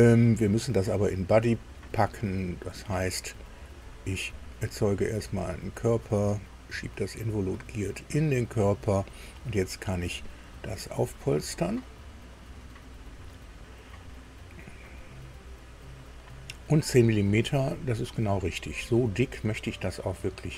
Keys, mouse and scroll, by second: 3.2 click, 4.4 click, 5.4 click, 6.6-7.7 drag, 11.8 click, 19.2-20.5 middle drag.